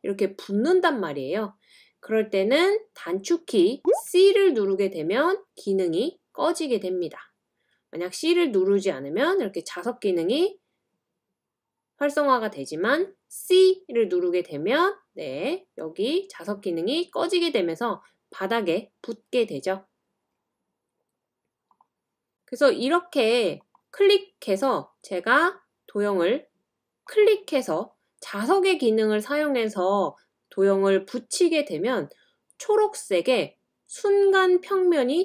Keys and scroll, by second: 4.6-5.4 typing.